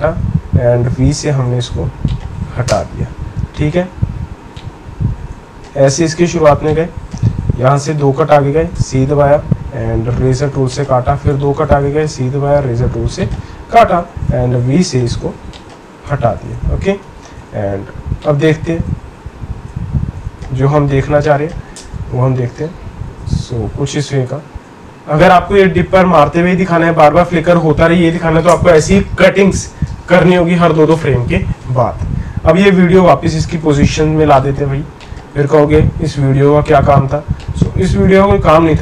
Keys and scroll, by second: 0.8 v, 2.7 BackSpace, 7.5 Right, 7.9 Right, 8.7 c, 11.1 Right, 11.3 Right, 14.3 v, 15.9 BackSpace.